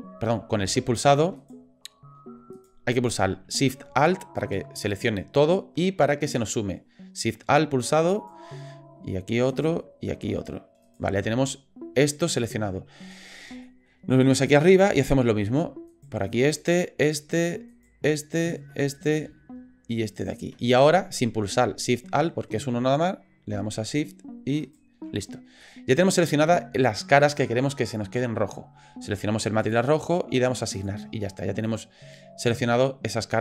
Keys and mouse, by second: 1.4 shift+click, 2.5 click, 4.4 alt+shift+click, 4.9 alt+shift+click, 8.1 alt+shift+click, 9.5 alt+shift+click, 10.8 alt+shift+click, 13.6 shift+click, 14.6 click, 15.9 alt+shift+click, 16.6 alt+shift+click, 17.7 alt+shift+click, 18.4 alt+shift+click, 18.7 middle click, 20.1 alt+shift+click, 24.6 shift+click, 25.6 middle click, 26.6 shift+click, 29.6 click, 30.8 click, 31.7 click.